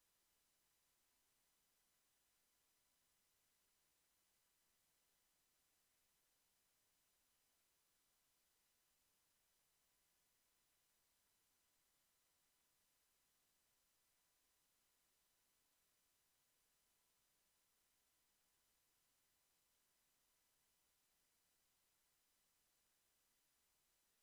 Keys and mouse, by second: 14.2 Tab, 15.1 a, 15.6 ctrl+s, 17.8 KP_1, 21.3 ctrl+s.